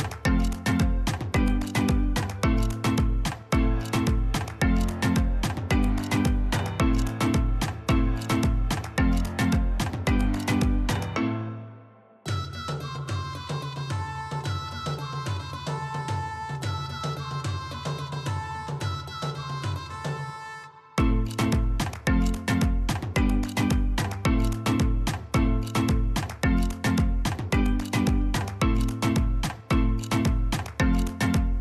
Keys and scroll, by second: 8.4 ctrl+z, 9.0 ctrl+z, 9.6 ctrl+z, 10.4 ctrl+z, 27.7 alt+Tab.